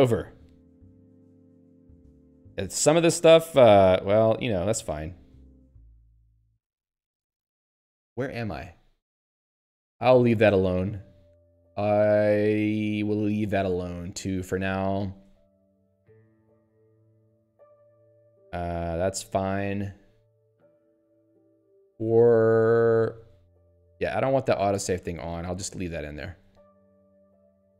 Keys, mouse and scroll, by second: 0.2 p, 0.6 Tab, 0.8 p, 0.9 Tab, 1.5 n, 4.2 click, 4.3 click, 4.8-6.8 typing, 9.8 p, 14.4 Tab, 14.8 n, 15.1 Tab, 16.0 n, 16.1 Tab, 17.1 n, 17.2 Tab, 20.1 n, 20.8 p, 21.7 Tab, 22.1 n, 23.1 p, 24.9 s.